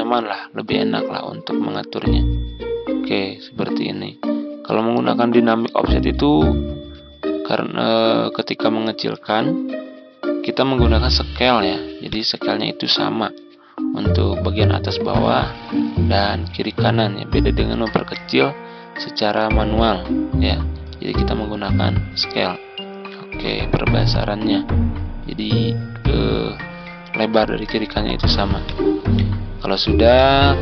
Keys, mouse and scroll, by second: 6.9 ctrl+scroll down 1, 12.0-30.6 drag.